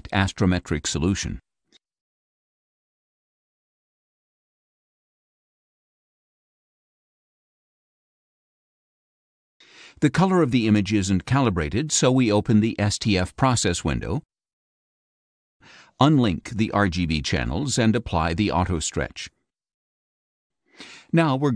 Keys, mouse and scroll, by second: 1.5 click, 2.5 scroll down 2, 3.3-7.7 drag, 12.6 click, 14.2 click, 16.1 click, 18.5 click.